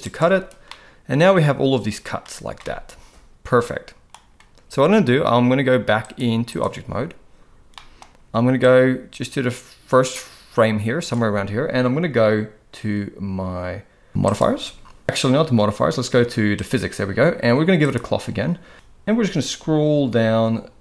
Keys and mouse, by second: 0.7-2.2 middle drag, 2.6-4.1 middle drag, 6.1-6.6 drag, 7.8 middle click, 8.6-14.5 drag, 16.5 click, 17.8 click.